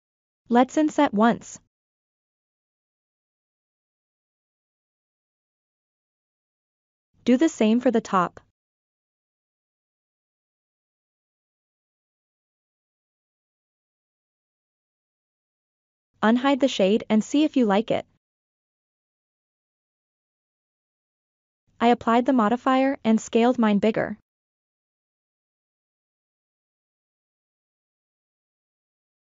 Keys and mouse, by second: 1.6-2.0 ctrl+middle drag, 2.2-2.8 middle drag, 3.1 shift+middle drag, 4.4-4.9 shift+middle drag, 5.0 middle click, 6.0 alt+click, 8.4 f, 9.5 i, 11.5 ctrl+middle drag, 12.5 middle click, 12.8 Tab, 13.3-13.7 shift+middle drag, 14.4-15.0 middle drag, 15.6 ctrl+middle click, 16.9 click, 17.6 middle click, 18.4 KP_1, 19.8 click, 20.6-21.2 drag, 22.0 q, 25.3 a, 25.9 click, 26.4 s, 27.1-29.2 drag.